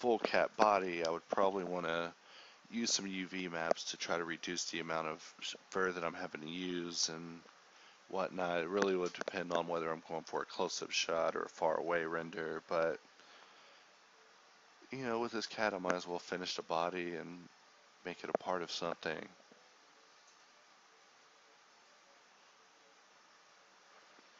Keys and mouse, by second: 1.2-2.0 drag, 3.5-7.2 drag, 8.6 click, 14.7 click, 16.0-17.8 drag, 18.0 Home, 19.5 g, 22.3 Escape, 22.9 g, 24.2 shift+a.